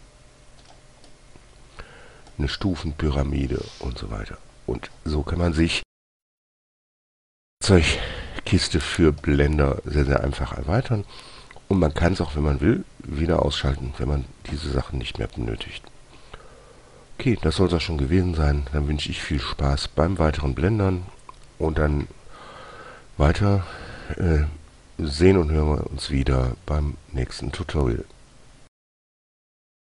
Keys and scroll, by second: 0.2 g.